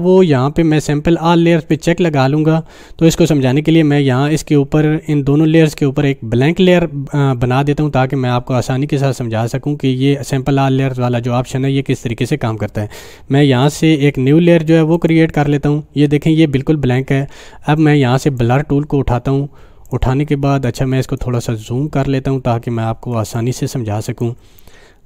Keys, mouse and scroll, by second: 1.7 click, 14.9 click, 15.0 click, 18.2 click, 21.3 scroll down 1, 23.3-24.3 click, 23.7 space.